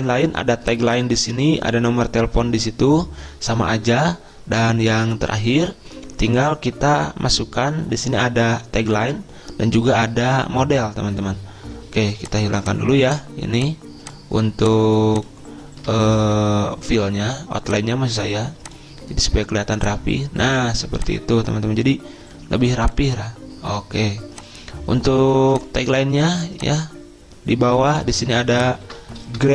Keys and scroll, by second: 29.4 ctrl+a.